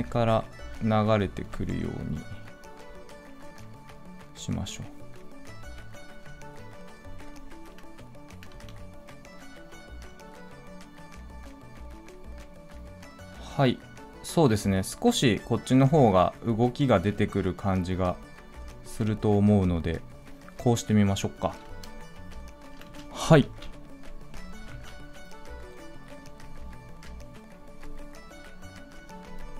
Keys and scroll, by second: 23.3 ctrl+a, 24.6 ctrl+s.